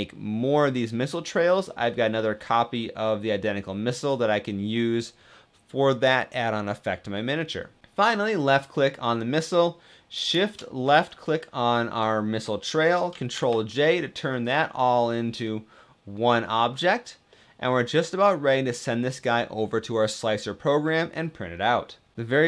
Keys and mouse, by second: 0.8 middle click, 2.8-4.0 middle drag, 4.2 middle click, 13.1 ctrl+j, 14.2 click, 15.2-15.8 drag, 15.8-16.6 middle drag, 17.1-18.9 middle drag, 20.6 middle click.